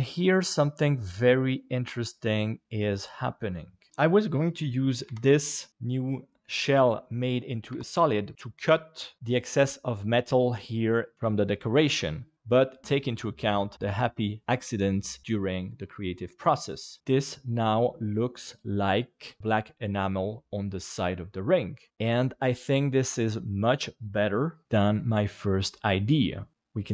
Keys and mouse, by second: 0.6 middle click, 3.1 middle click, 5.7 middle click, 7.7 KP_Divide, 8.3 middle click, 9.2 middle click, 10.1-11.1 middle drag, 17.0 alt+a, 18.9 middle click, 20.1 middle click, 26.5 middle click.